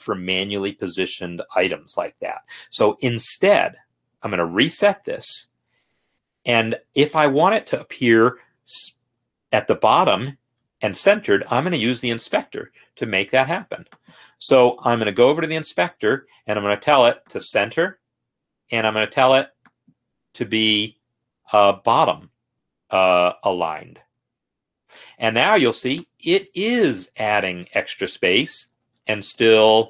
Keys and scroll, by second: 4.9 ctrl+r, 15.2 F8, 27.6 Page_Down, 28.3 Return, 28.7-29.8 typing.